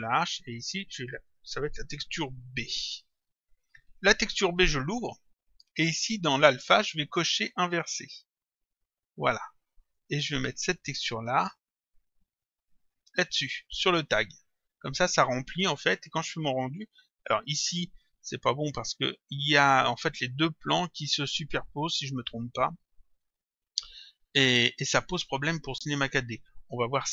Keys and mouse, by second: 1.0 click, 2.6 shift+b, 3.9 click, 8.2 click, 9.9 click, 11.6 click, 16.0 click, 23.5 click, 25.7 click.